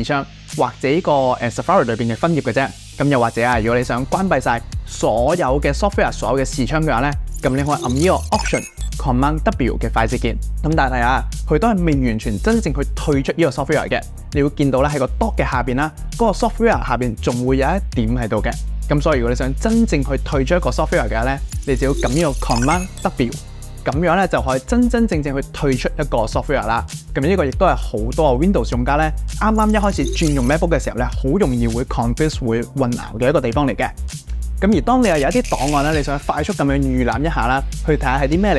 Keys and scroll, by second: 2.8 super+w, 4.9 super+w, 10.3 alt+super+w, 23.7 super+q.